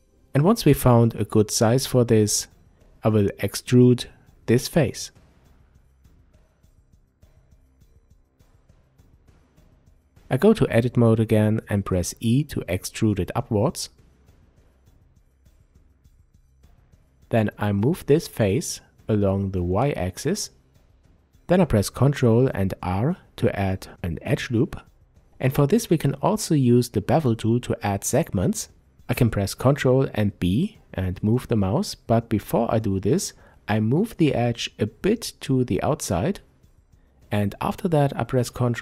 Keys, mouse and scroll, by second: 3.8 click, 4.4 Tab, 5.5-6.4 drag, 6.4-15.1 middle drag, 8.4 Tab, 10.9 e, 15.1 click, 16.1-23.5 drag, 19.5 ctrl+r, 23.9-34.3 middle drag, 26.6-28.0 scroll up 2, 28.0 ctrl+b, 31.3 Escape, 34.3-38.8 drag, 38.1 ctrl+b.